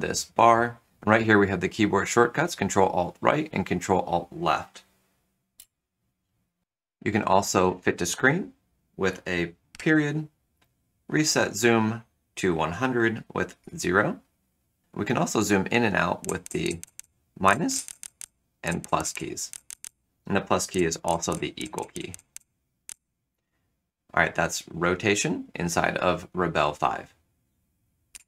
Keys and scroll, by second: 9.7 ., 13.5 0, 15.9-22.8 typing.